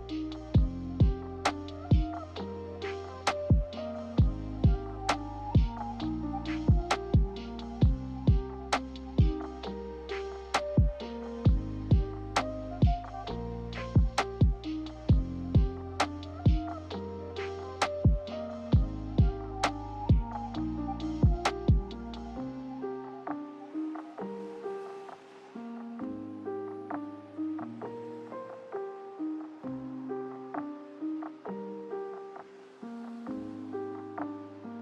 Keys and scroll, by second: 0.0 b, 3.3 Delete, 3.3 z, 7.3 g, 15.9 z, 18.7 g, 22.5 a, 28.5 z, 30.0-31.6 typing, 33.5 ctrl+h, 33.9-34.6 typing.